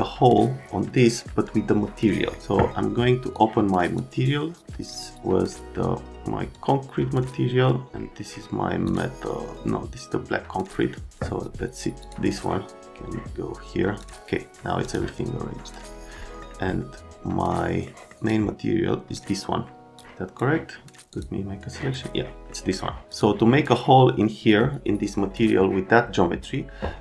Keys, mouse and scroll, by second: 3.3 click, 4.9 click, 6.5 click, 8.8 click, 12.0 click, 14.0 click, 14.8 click, 16.2 right click, 17.8 right click, 18.1 click, 19.9 click, 21.1 click.